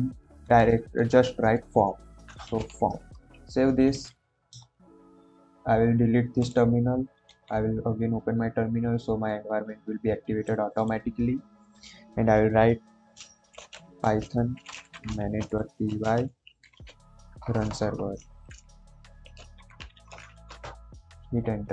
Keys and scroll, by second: 0.5 shift+[, 2.1-3.0 typing, 4.6 ctrl+`, 7.3 ctrl+`, 13.1-17.3 typing, 18.4-20.8 typing.